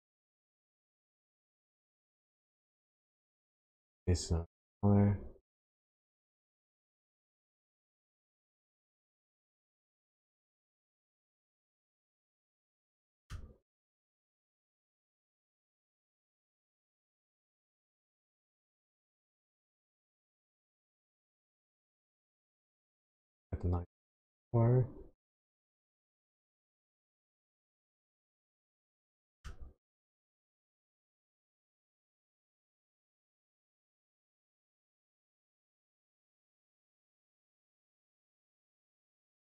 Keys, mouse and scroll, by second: 2.8 middle click, 3.5 scroll down 1, 6.1 click, 10.1-10.8 scroll down 6, 10.8 middle click, 12.0-12.8 scroll up 4, 12.8 middle click, 13.7 scroll down 1, 15.6 click, 17.9 middle click, 18.9-19.6 scroll up 4, 19.6-20.9 scroll down 1, 20.9 click, 28.8 middle click, 29.9-30.6 scroll up 6, 31.9 click, 36.6 click.